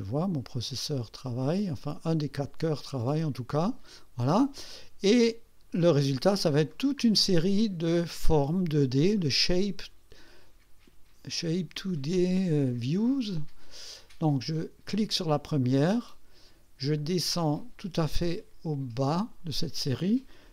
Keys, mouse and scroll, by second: 5.1-5.4 scroll down 2, 6.7-7.0 scroll up 2, 8.4-13.2 drag, 13.8 scroll up 2, 15.2 click, 17.0-19.5 drag.